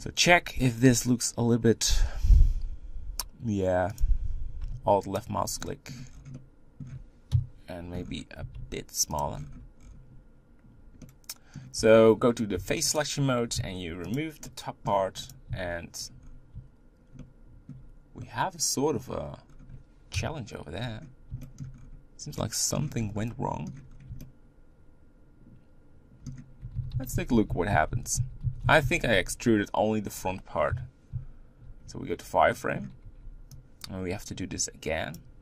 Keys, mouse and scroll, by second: 0.5-4.0 scroll up 1, 4.0 click, 5.1 alt+click, 5.6 middle click, 6.1 scroll down 5, 6.3 middle click, 7.3 KP_1, 7.9 scroll up 6, 8.4 s, 9.4-11.0 scroll down 7, 9.5 Tab, 11.0 middle click, 11.8 Tab, 12.6 3, 13.0 click, 14.1 x, 14.5 middle click, 15.3 click, 15.5 x, 16.2-17.2 scroll up 3, 17.2-19.5 shift+middle drag, 19.5-20.1 scroll down 1, 20.1 KP_1, 20.8-21.4 scroll up 5, 21.4 shift+middle click, 21.7-22.4 scroll up 3, 22.4 middle click, 22.8 scroll up 1, 23.0 scroll down 4, 23.2 middle click, 23.9-24.2 scroll down 2, 24.2-26.7 shift+middle drag, 26.7 ctrl+z, 26.9 ctrl+z, 27.1 ctrl+z, 27.3 ctrl+z, 27.8-28.4 ctrl+z, 28.6 ctrl+z, 28.8 ctrl+z, 29.1 ctrl+z, 30.7 KP_1, 31.7 z, 32.5-35.1 shift+middle drag, 35.1 b.